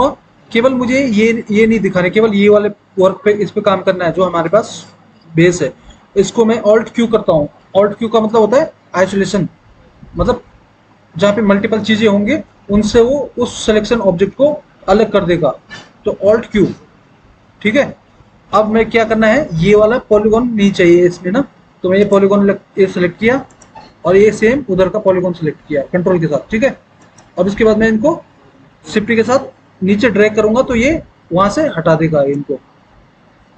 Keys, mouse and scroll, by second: 16.6 alt+q.